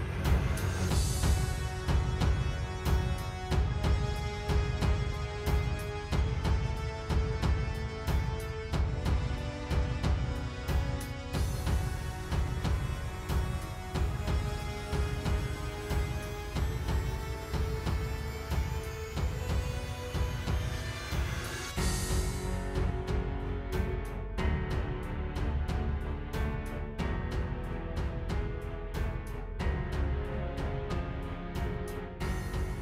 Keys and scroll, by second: 0.0 space, 0.7 super+j, 1.8 space, 2.1 space, 3.3 space, 3.7 space, 4.2 super+s, 4.8 space, 5.0 space, 5.8 space, 7.9-10.5 typing, 11.3 super+z, 15.3 space, 15.5 space, 16.4 super+s, 18.4 space, 18.8 space, 19.1 super+Tab, 21.8 super+z, 26.7 super+j.